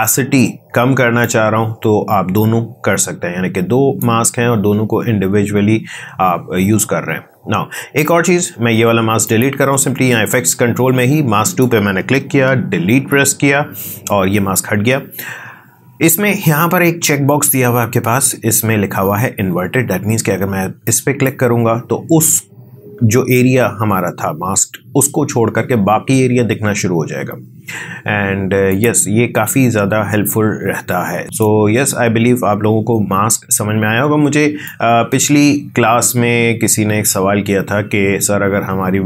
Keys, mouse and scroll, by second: 1.2-9.2 drag, 12.9 Delete, 20.8-31.4 drag, 31.4 space, 33.6 space, 34.6-39.0 drag.